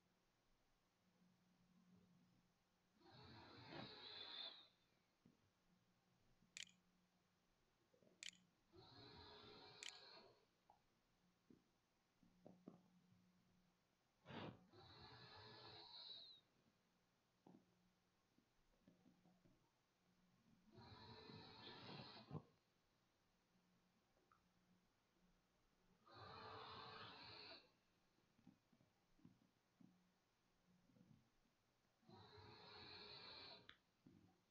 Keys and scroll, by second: 4.6-11.1 typing, 15.3-16.8 typing, 27.6-28.6 typing, 32.7 r, 34.1-34.5 typing.